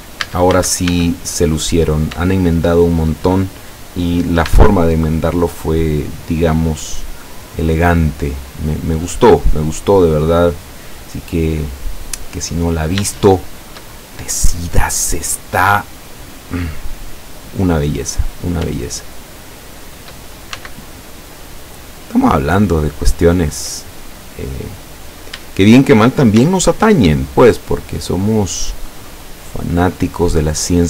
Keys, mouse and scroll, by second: 0.3 a, 1.9 right click, 2.8 shift+right click, 4.5 e, 7.8 click, 8.2 scroll down 1, 8.7-9.1 middle drag, 9.5 middle click, 10.8-12.1 middle drag, 13.1 shift+middle click, 14.9-16.4 middle drag, 16.4 scroll up 2, 17.1 scroll down 2, 18.1 right click, 19.6 shift+right click, 20.6 shift+x, 21.2 click, 21.9 scroll up 2, 23.0 right click, 23.5 scroll up 1, 24.2 scroll down 1, 26.4 x, 26.9 click, 28.2-28.9 middle drag, 28.9 scroll up 1, 29.7 scroll up 2, 30.4 right click.